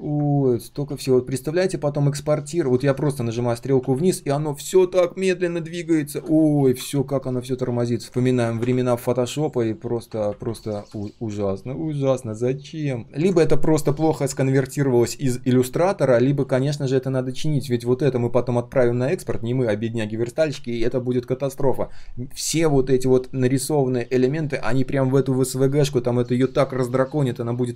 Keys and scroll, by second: 6.9 ctrl+z, 12.3 ctrl+shift+3, 12.8 ctrl+shift+3, 16.5 ctrl+shift+3.